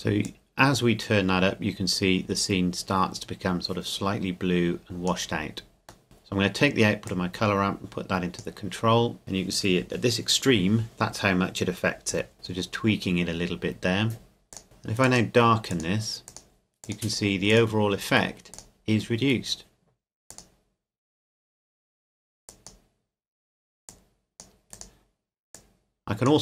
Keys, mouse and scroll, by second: 0.2 click, 6.0 middle click, 7.1 click, 12.3 click, 14.5 click.